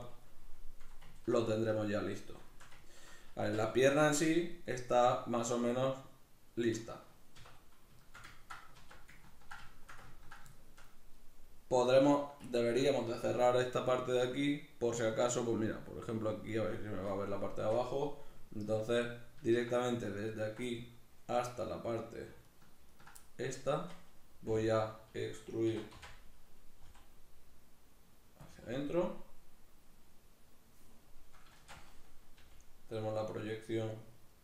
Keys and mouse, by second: 3.2 Tab, 7.1 \, 8.5 alt+q, 18.4 right click, 19.5 right click, 20.2 ctrl+right click, 20.5-22.3 middle drag, 22.3 ctrl+right click, 22.7 ctrl+right click, 23.0-28.3 middle drag, 25.5 e, 28.3 click, 28.5-32.8 middle drag, 31.3 shift+Tab, 32.2 g, 32.8 click, 32.9-34.4 middle drag.